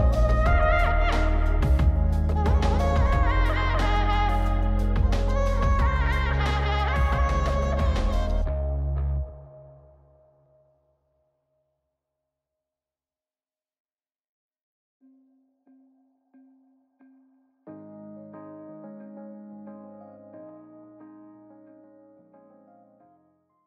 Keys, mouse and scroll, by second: 4.1-5.1 drag, 6.7 click, 7.2 F9.